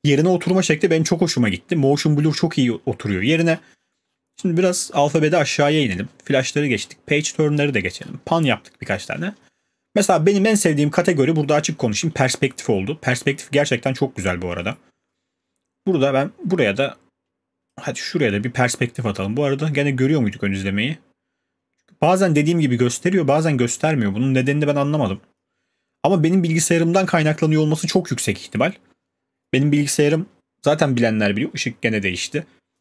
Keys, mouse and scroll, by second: 1.8-5.0 scroll, 3.7-5.5 middle drag, 5.5 scroll, 5.7 scroll down 1, 5.7 scroll, 5.7 scroll down 1, 5.8 scroll, 5.9 scroll down 1, 5.9 scroll down 1, 6.0 scroll down 1, 6.0 scroll down 1, 6.1-6.4 scroll down 1, 6.4 scroll, 6.4 scroll down 1, 6.5 scroll down 1, 6.5 scroll down 1, 6.5 scroll down 1, 6.8 scroll, 6.8 scroll down 1, 6.9-8.9 scroll down 41, 8.9-9.3 scroll down 8, 9.3-10.5 scroll, 11.7-13.2 scroll, 13.2 scroll.